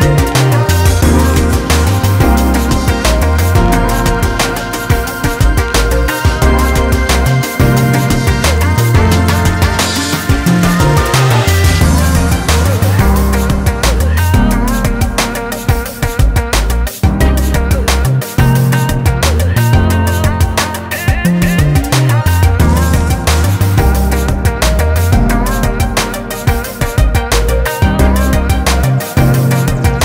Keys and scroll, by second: 12.2 [, 12.4 [, 12.6 [, 19.1 ctrl+space, 26.8 [, 27.0 [.